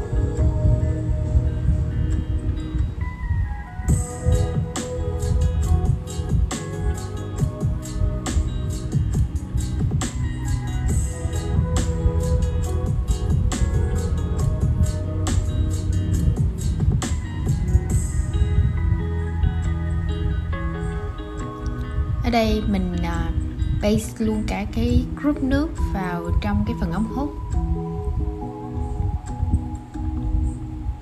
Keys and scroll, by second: 10.3 super+z, 11.3 super+z, 16.9 super+c, 29.7 shift+super+v.